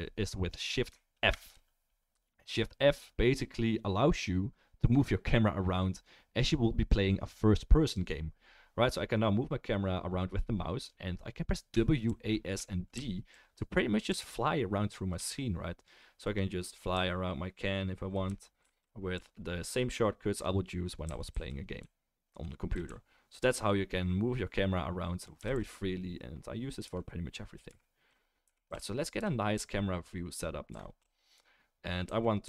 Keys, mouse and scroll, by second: 1.3 shift+f, 31.9-32.4 right drag.